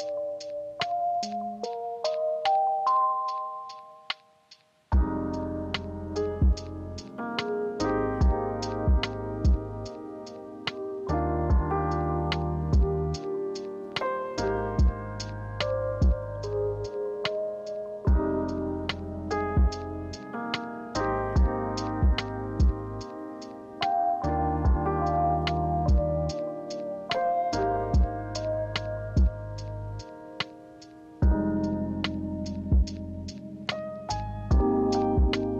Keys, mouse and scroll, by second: 6.3 ctrl+z, 19.8 ctrl+z, 22.3 ctrl+z.